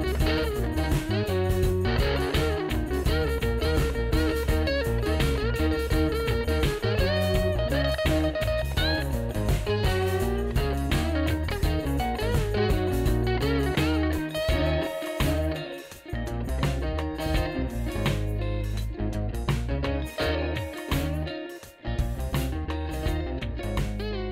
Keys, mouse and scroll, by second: 1.4 F4, 13.6 a, 15.1 c, 19.9 F4, 22.3 ctrl+z.